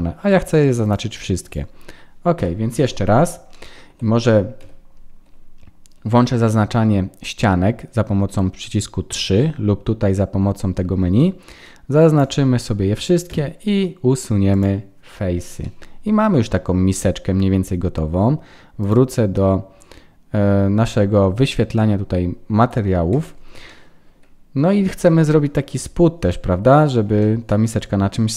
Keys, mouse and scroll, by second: 0.8 click, 2.3 KP_1, 3.5 shift+middle click, 4.6 3, 11.1 click, 13.2 Delete, 15.6 middle click, 18.8 click, 23.6 middle click, 27.0 scroll up 1, 27.2 middle click.